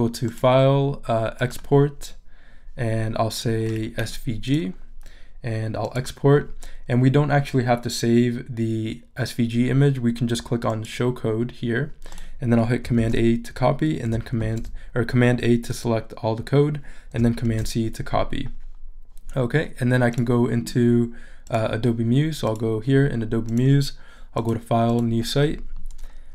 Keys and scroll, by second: 13.0 super+a, 17.4 super+c.